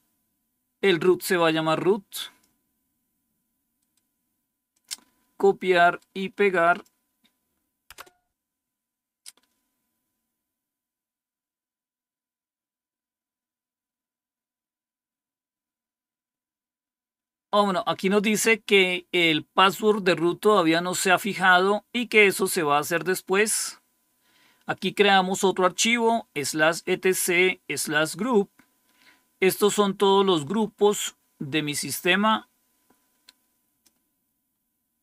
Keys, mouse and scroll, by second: 3.7 right click, 4.6 click, 5.7 right click, 6.6 click, 6.9 click, 7.8 Return, 12.1-13.1 scroll down 1, 13.1-14.0 scroll down 1, 23.5-24.3 scroll down 1, 24.3-27.9 scroll up 1, 27.9-30.1 scroll down 3, 30.1-31.2 scroll up 2, 31.2-33.8 drag, 34.4-35.0 scroll up 2.